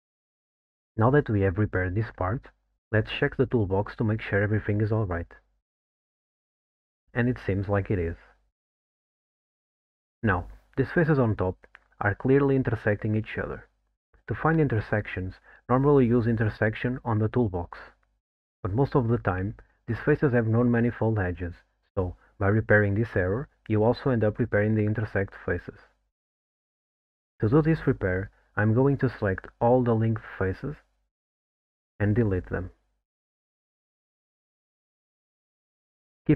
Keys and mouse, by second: 1.5 click, 1.8 middle click, 3.2 middle click, 5.4 click, 9.0-10.1 middle drag, 12.0 alt+middle click, 13.1 alt+middle click, 13.8 middle click, 16.9 click, 20.7 click, 23.2 3, 30.0 3, 30.3 click, 31.1 q, 32.8 x.